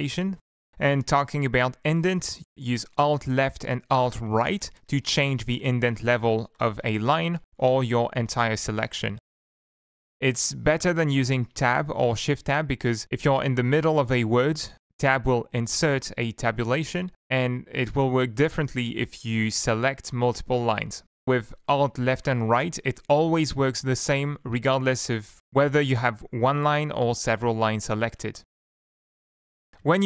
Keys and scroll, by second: 0.6 Up, 3.6 alt+Left, 4.1 alt+Right, 4.9 alt+Right, 5.5 alt+Left, 5.9 alt+Left, 6.2 alt+Left, 6.6 alt+Right, 6.8 alt+Right, 7.2 alt+Left, 7.6 alt+Right, 8.0 shift+Down, 8.2 shift+Down, 8.6 alt+Right, 9.0 alt+Left, 11.6 Up, 11.6 Home, 13.1 Right, 13.2 Right, 13.4 Right, 13.8 Tab, 16.3 ctrl+z, 17.6 shift+Down, 19.1 Tab, 20.2 shift+Tab, 23.3 Up, 23.3 alt+Left, 23.6 alt+Right, 23.9 alt+Right, 24.3 alt+Left, 26.0 shift+Down, 28.8 Up, 28.8 Right, 29.0 Right, 29.1 Right, 29.7 ctrl+Right, 29.8 ctrl+Right.